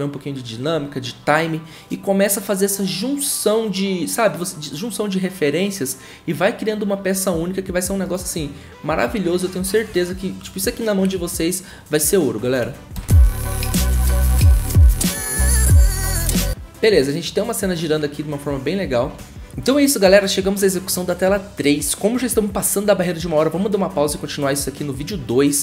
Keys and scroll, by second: 12.9 0.